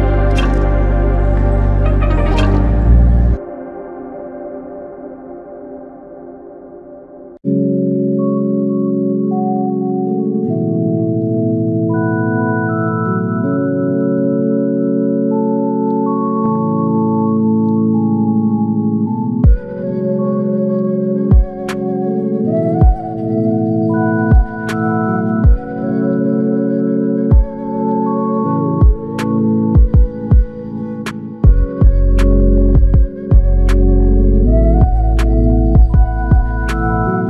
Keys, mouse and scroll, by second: 1.6 alt+click, 5.8 alt+click, 11.5 typing, 12.3 alt+click, 13.3 double click, 17.5 alt+click, 18.4 double click, 18.7 alt+click, 21.3 double click, 22.4 shift+click, 30.0 r.